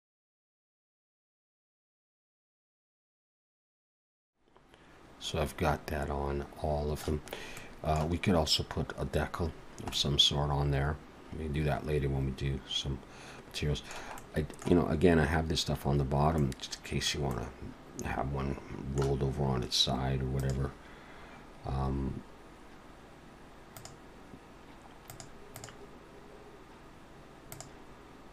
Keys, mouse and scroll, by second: 0.1 click, 0.5 click, 0.6 alt+a, 0.9 Tab, 0.9 middle click, 1.0 click, 1.1 Tab, 1.2 click, 1.3 middle click, 1.5 shift+click, 1.8 click, 2.2 shift+click, 2.5 click, 2.7 click, 3.1 click, 3.2 alt+a, 3.2 middle click, 3.4 middle click, 3.6 Tab, 3.7 alt+a, 3.8 scroll down 3, 3.9 middle click, 4.2 middle click, 7.3 scroll up 1, 7.6 middle click, 9.5-9.9 scroll down 2, 9.9 middle click, 14.2 middle click, 16.0-16.4 scroll down 2, 16.4 middle click, 17.3 middle click, 20.9 click, 21.2-23.4 scroll up 1, 23.8 click, 25.1 click, 25.6 click, 27.5 click.